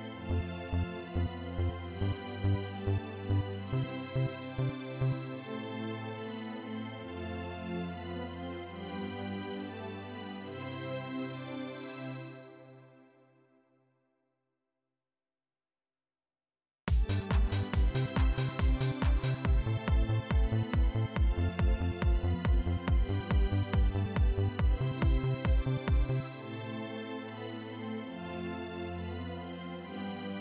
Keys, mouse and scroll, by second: 0.7 click, 1.6 click, 3.1 click, 3.7 click, 7.8 click, 8.8-10.1 drag, 10.4 right click, 11.0 right click, 11.8 click, 12.3 right click, 12.8 right click, 13.5 right click, 15.1 right click, 16.6 click, 20.1-22.5 drag, 27.7 click.